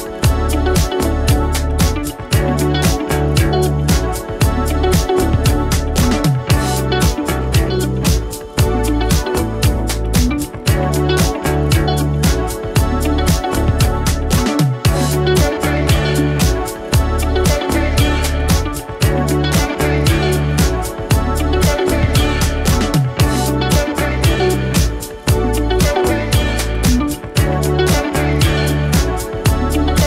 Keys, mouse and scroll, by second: 2.4 space, 5.1-5.7 drag, 9.9 space, 12.0-12.6 click, 12.4 space, 15.4 click, 16.9 space, 19.1 click, 23.1-23.7 click, 23.6 space, 25.9-26.5 click, 26.4 space, 28.9-30.0 drag.